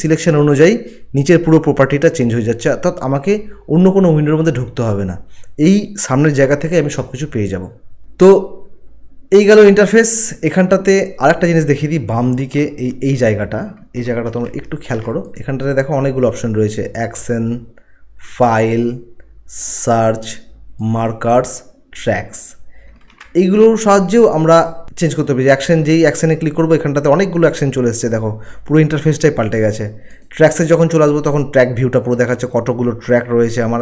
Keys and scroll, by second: 14.3 ctrl+1, 23.0 ctrl+1.